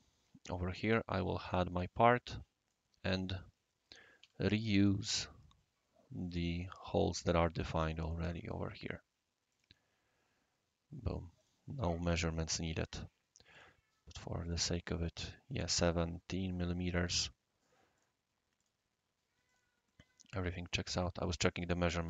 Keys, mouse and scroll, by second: 1.4 click, 2.1-2.7 right drag, 3.4 scroll up 1, 3.4 scroll down 1, 3.5 scroll up 1, 3.9 scroll down 1, 4.2-5.0 typing, 6.2 click, 8.0 click, 9.5 click, 10.0 scroll up 1, 10.1-10.4 scroll down 2, 10.1 typing, 10.4 scroll up 1, 11.3 click, 12.2 scroll up 1, 12.2-12.7 scroll down 2, 12.6 Escape, 13.5 click, 14.4 click, 16.9 click, 17.9 click, 18.6 click, 19.5 click, 19.9-20.7 right drag, 21.5 click.